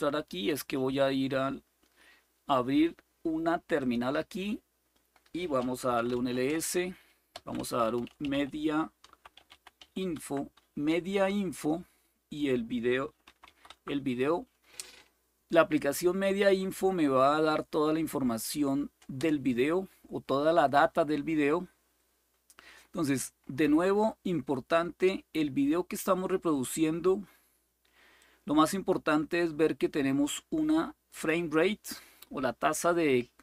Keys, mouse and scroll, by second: 0.0-2.7 right drag, 3.5-5.6 drag, 5.4-10.0 typing, 13.0-13.4 typing, 13.4 Tab, 18.9 Return, 22.0-25.7 scroll up 1, 27.9-31.0 drag.